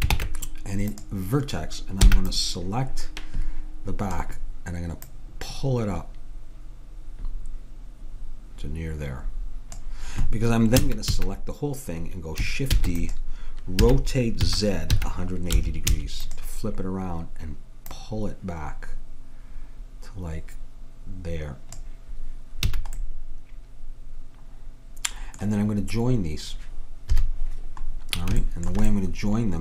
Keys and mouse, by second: 0.2 ctrl+Tab, 2.1 b, 5.1-7.0 drag, 10.9 a, 11.2 a, 12.9 shift+d, 13.9 r, 18.0-19.7 drag, 22.8 a, 23.1-25.2 middle drag, 27.1 KP_7.